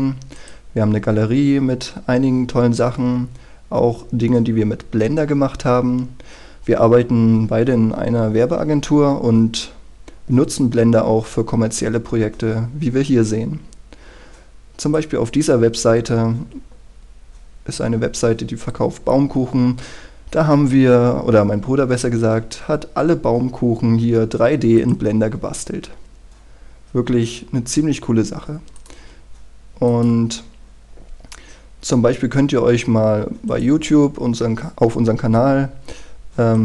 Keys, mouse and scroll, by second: 0.6 click, 1.3-13.3 scroll down 1, 13.3 scroll up 1, 13.6-15.0 scroll down 1, 15.0 click, 16.9-25.0 scroll down 1, 25.0 click, 26.4-28.6 scroll down 1, 28.6-33.6 scroll up 1, 33.6-36.6 drag.